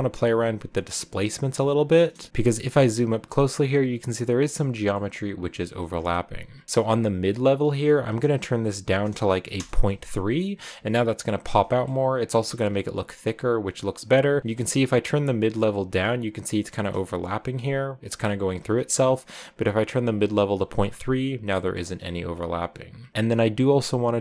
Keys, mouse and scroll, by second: 0.6 click, 2.3 scroll up 3, 9.4-10.4 drag, 10.4-11.6 scroll down 6, 11.6-12.9 shift+middle drag, 12.9-15.7 shift+drag, 15.7-16.3 scroll up 2, 16.7-17.1 scroll down 1, 18.6 ctrl+z, 20.2 scroll down 2, 21.6-23.1 middle drag.